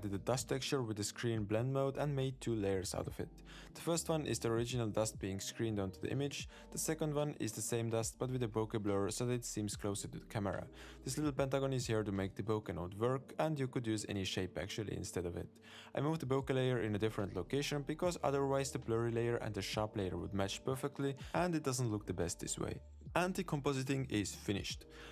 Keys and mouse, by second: 0.3 click, 0.4 middle click, 0.5 click, 0.6 click, 0.6 click, 0.9 middle click, 1.0 shift+click, 1.0-3.6 typing, 1.1 click, 1.3 middle click, 1.6 middle click, 1.6 click, 1.8 click, 1.9 middle click, 1.9 click, 2.3 click, 2.7 click, 2.8 click, 2.9 click, 3.2 click, 3.4 shift+click, 3.7 middle click, 22.1 middle click.